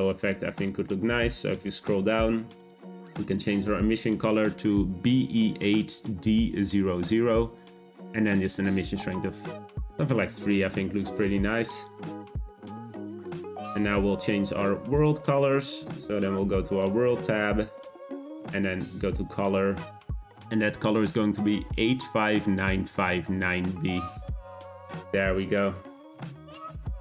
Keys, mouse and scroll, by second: 0.1-2.5 scroll down 10, 2.5 click, 8.6-10.0 drag, 10.4 click, 10.7 scroll down 2, 11.7 click, 14.9 click, 16.7 click, 18.3 click, 26.0 scroll up 1.